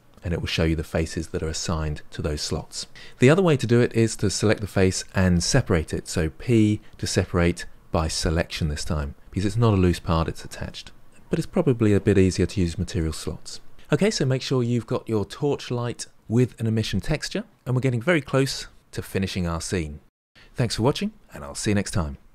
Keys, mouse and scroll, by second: 3.9 click, 13.7-14.2 scroll down 1, 14.2-22.3 shift+middle drag.